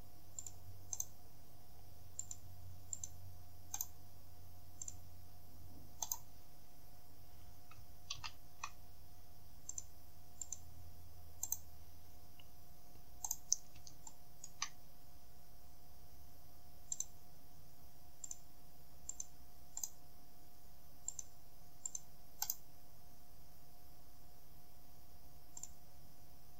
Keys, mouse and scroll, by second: 0.5 click, 1.0 right click, 2.3 click, 3.0 click, 3.8 right click, 4.3 middle click, 4.9 click, 6.1 right click, 8.2 ctrl+z, 9.8 click, 10.5 click, 11.5 right click, 12.2-12.5 scroll up 2, 13.3 right click, 14.1 shift+middle click, 14.8-15.3 shift+scroll up 1, 15.3-15.8 scroll down 1, 17.0 click, 18.3 click, 19.2 click, 19.9 right click, 21.1 click, 21.9 click, 22.5 right click, 25.7 click.